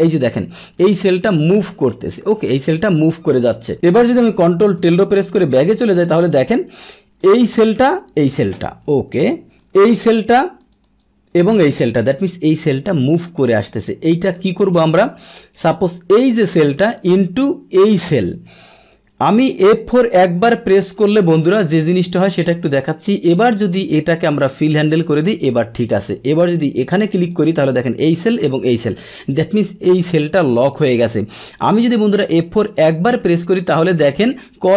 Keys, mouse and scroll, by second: 1.3 Up, 1.3 Down, 1.7 Up, 3.7 ctrl+Tab, 7.2 click, 7.3 click, 9.0 Return, 9.6 click, 9.9 click, 10.6 click, 11.8 Return, 14.1 click, 14.3 click, 15.6 click, 16.5 BackSpace, 16.7 BackSpace, 18.0 click, 19.7 F4, 22.1 Return, 23.5 click, 24.3 click, 27.0 click, 27.1 click, 29.4 Return, 31.1 click, 31.4 click.